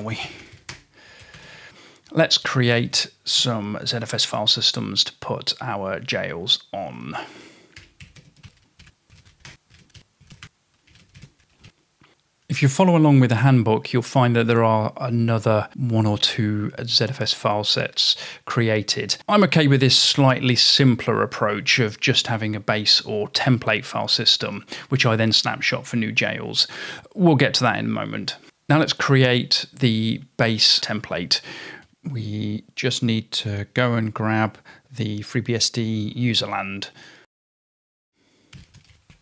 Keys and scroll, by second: 0.0-3.4 typing, 7.6-12.1 typing, 31.7-39.2 typing.